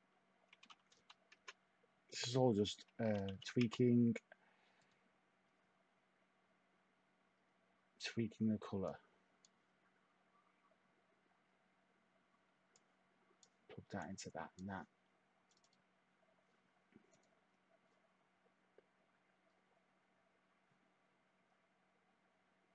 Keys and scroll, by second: 0.6-1.4 typing, 3.0-3.8 typing.